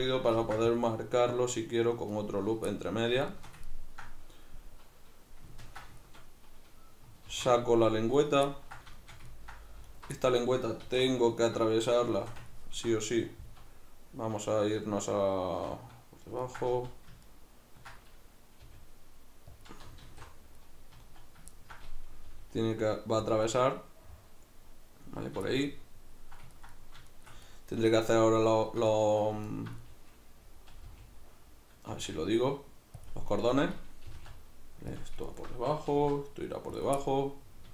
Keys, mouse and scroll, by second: 0.4 ctrl+r, 2.3 right click, 2.7-8.2 middle drag, 7.3 alt+h, 8.2 right click, 8.5-9.9 ctrl+middle drag, 9.9 alt+right click, 10.2-15.7 middle drag, 10.9 alt+q, 13.4 z, 14.8 alt+q, 16.4 ctrl+middle click, 16.7 z, 17.3-18.6 ctrl+middle drag, 18.6 g, 19.6 click, 20.1 alt+q, 20.9 z, 21.5-23.3 ctrl+middle drag, 22.3 g, 23.3 click, 23.5-29.5 middle drag, 29.5 alt+right click, 29.8-33.1 middle drag, 30.9 g, 33.1 click, 33.4 alt+right click, 34.1 g, 35.0 click, 35.3 alt+right click, 35.9 g, 36.8 click, 37.0-37.7 middle drag.